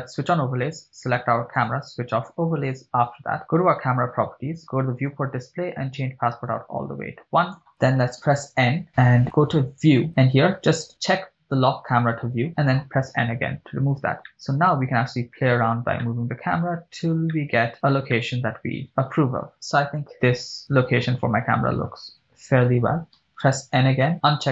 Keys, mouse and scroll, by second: 0.7 right click, 2.1 click, 3.9 click, 5.0 click, 5.7 scroll down 2, 6.5-7.7 drag, 8.7 n, 9.9 click, 10.9 click, 12.5 n, 13.5 middle click, 14.6 shift+middle click, 16.6 middle click, 17.7 middle click, 18.5 middle click, 19.2 shift+middle click, 21.2 click, 22.1 scroll down 3, 23.4 n, 24.3 click.